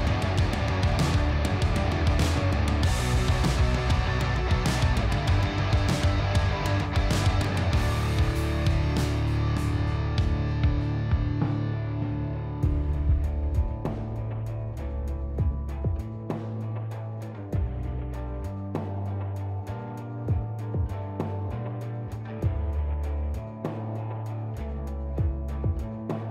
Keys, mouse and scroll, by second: 2.9 alt+click, 6.2 alt+e, 7.4 click, 10.6 alt+a, 14.1 ctrl+r, 14.7 click, 19.1 click, 20.8 alt+click, 22.4 alt+e, 23.0-26.3 drag.